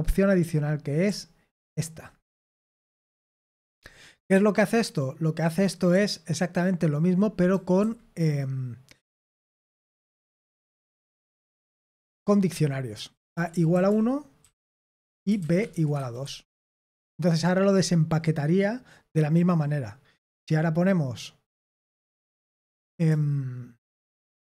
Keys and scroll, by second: 0.0-7.7 typing, 9.8-11.4 typing, 11.9 Escape, 12.4-18.3 typing, 23.8 k.